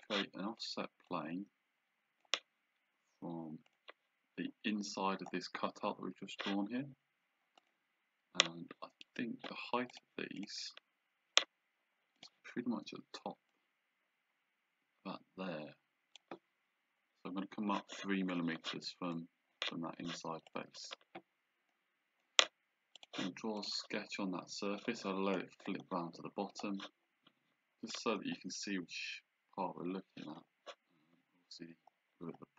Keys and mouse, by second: 0.0 click, 1.2 click, 3.7 click, 7.7 click, 10.0 click, 12.2 click, 13.6 click, 19.2 click, 20.6 click, 21.8 click, 23.1 click.